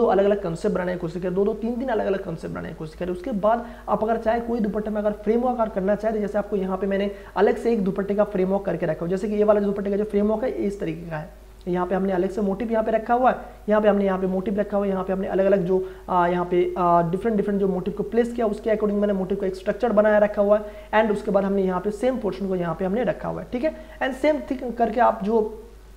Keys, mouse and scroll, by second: 3.3 click, 7.1 click, 9.6 click, 12.6 click, 16.2 click, 19.4 click, 25.1 click.